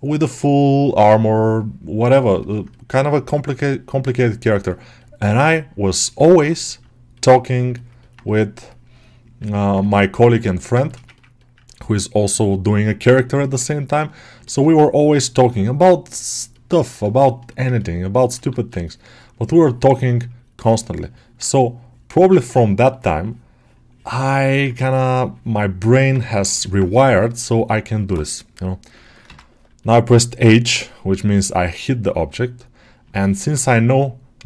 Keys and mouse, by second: 2.0 ctrl+middle click, 2.3 alt+middle click, 3.6 alt+middle click, 4.0 ctrl+middle click, 4.3 alt+middle click, 6.3 middle click, 7.6 middle click, 7.9 middle click, 8.1-9.3 drag, 9.3 ctrl+middle click, 9.7 click, 10.4 alt+shift+middle click, 10.7 shift+middle click, 13.2 alt+middle click, 14.3 ctrl+alt+middle click, 14.9-17.0 drag, 14.9-17.0 right drag, 17.0 shift+middle click, 17.4 middle click, 17.6 ctrl+middle click, 18.0 alt+middle click, 19.3-21.0 drag, 21.0 middle click, 21.7-24.2 ctrl+drag, 24.2 middle click, 24.6 ctrl+click, 25.8 g, 26.1 ctrl+alt+middle click, 26.5 alt+middle click, 26.9 h, 29.1 alt+h, 29.7 middle click, 30.2 g, 31.6 click, 32.7 click, 33.0 ctrl+alt+middle click.